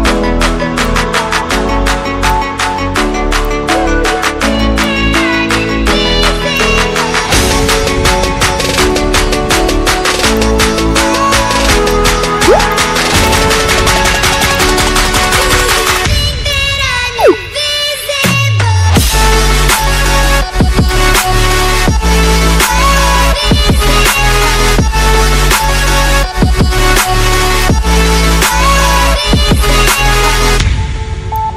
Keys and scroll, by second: 13.3 ctrl+z, 25.1 ctrl+z.